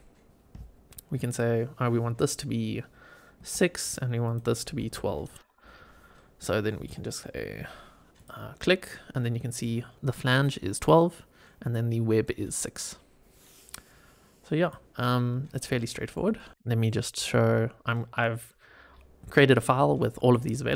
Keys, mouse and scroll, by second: 1.2-3.8 drag, 4.1-5.4 drag, 8.1 click, 8.8-9.5 middle drag, 9.9-11.3 scroll down 2, 12.8-14.5 scroll down 1, 14.5 click, 15.0-15.6 scroll down 4, 15.7-16.1 shift+middle drag, 16.3 middle click, 16.5 click.